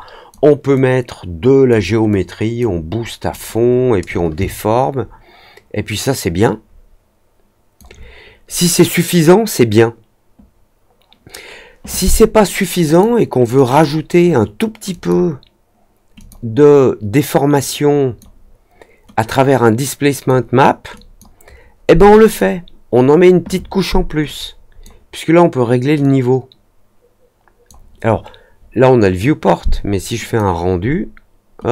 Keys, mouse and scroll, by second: 0.7-1.6 drag, 2.0-2.5 drag, 3.2 click, 4.3-7.7 alt+drag, 12.8 click, 13.5 click, 13.6 click, 14.8 click, 16.1 click, 17.5 click, 19.2-20.2 drag, 20.9 click, 22.2 click, 24.2 click, 25.9 click, 30.2 click.